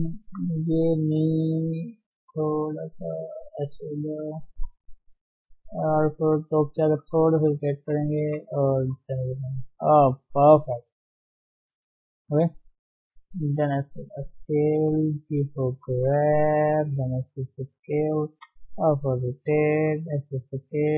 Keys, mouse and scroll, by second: 0.3 g, 4.6 KP_7, 5.8 r, 7.2 shift+z, 9.0 KP_1, 9.4-10.1 scroll up 2, 10.3 shift+z, 10.5 shift+middle click, 11.3 e, 12.5 shift+middle click, 12.9 s, 15.3 g, 16.9 s.